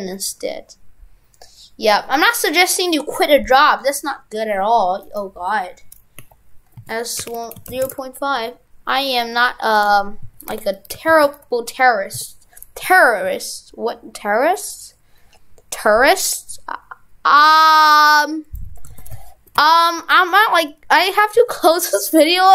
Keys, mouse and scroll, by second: 5.0 right click, 18.9 shift+f.